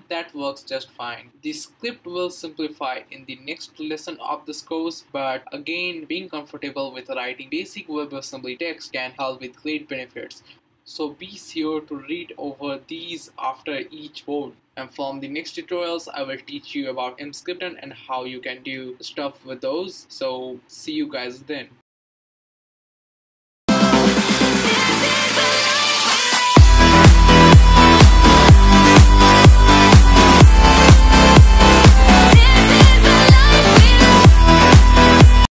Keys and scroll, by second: 0.0 Return, 3.4 Page_Up, 3.4 Return.